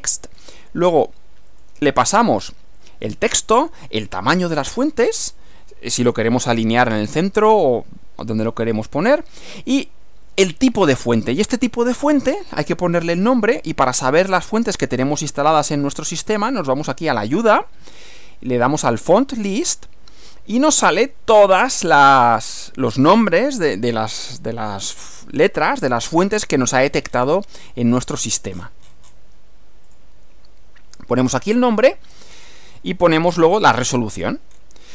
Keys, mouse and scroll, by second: 0.3 click, 1.5 click, 14.3 click, 15.2 click, 16.5 click, 19.1 click, 20.4-21.1 drag, 22.3 click, 23.4-24.0 scroll down 1, 26.8-27.4 scroll down 2, 28.5-29.3 scroll up 2, 29.9 click, 32.7 click, 34.5 scroll down 2.